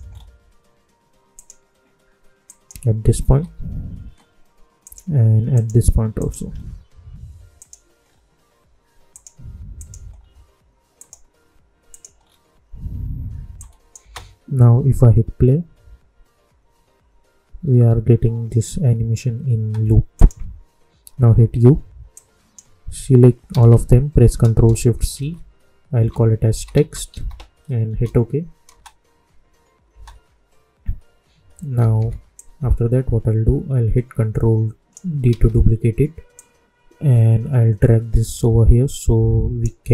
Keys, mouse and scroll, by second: 0.0-1.3 scroll up 1, 1.3 click, 3.2 k, 4.8 click, 6.5-7.5 scroll down 1, 7.5 click, 8.0 scroll down 1, 9.1 click, 10.1 scroll down 1, 10.9 click, 12.1 scroll down 1, 13.5 click, 13.9 space, 19.4 space, 20.1 click, 21.2 u, 22.1-23.4 drag, 23.4 ctrl+a, 25.1 ctrl+shift+c, 25.9 t, 27.8 Return, 28.6 space, 31.7 typing, 32.3-35.2 drag, 35.2 ctrl+d, 36.3 click, 36.3-39.9 drag.